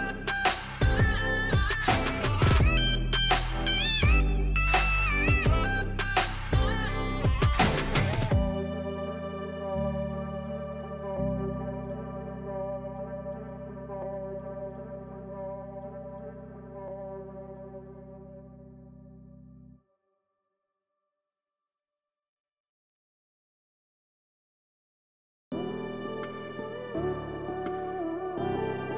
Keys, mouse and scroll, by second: 2.9 click, 8.0 click, 10.9 click, 27.0 click.